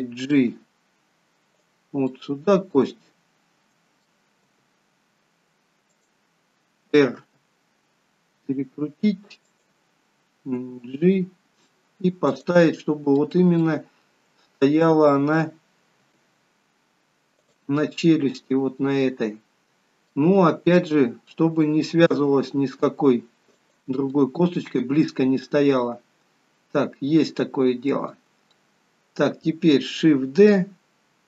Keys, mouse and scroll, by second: 0.3 g, 2.2 middle click, 4.5 g, 13.2 middle click, 13.7 middle click, 16.1 g, 17.9 middle click, 20.5 middle click, 22.2 g, 24.2 middle click, 28.6 middle click.